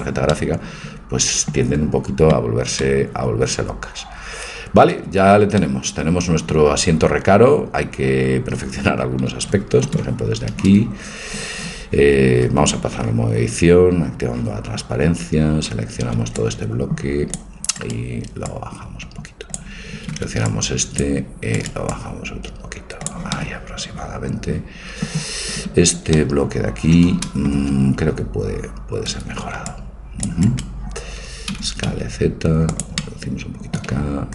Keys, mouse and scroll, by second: 0.4 middle click, 5.1 Tab, 12.6 Tab, 16.2 c, 18.4-20.4 drag, 19.9 a, 20.2 c, 21.9-23.4 drag, 23.6-24.7 middle drag, 25.7 a, 29.2 c, 31.5 s, 33.0 middle click.